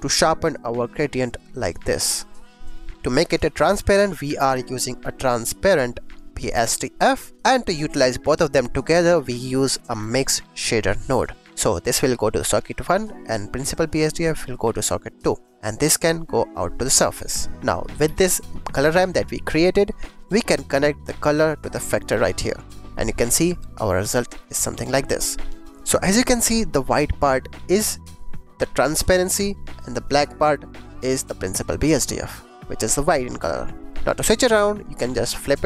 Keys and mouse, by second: 0.4 click, 2.1-3.0 drag, 3.2 shift+a, 6.4 click, 7.2 click, 8.7 click, 9.0 shift+a, 11.4 click, 11.7 click, 13.5 click, 13.7-14.9 drag, 15.3 click, 16.0 click, 17.4 click, 18.0 g, 18.4 click, 18.6 click, 19.0 click, 20.9-22.2 drag, 26.0 click, 26.7 click, 27.7 click, 28.5 click, 30.1 click, 30.6 click, 31.0-32.3 drag, 33.8 click, 35.2-35.6 drag.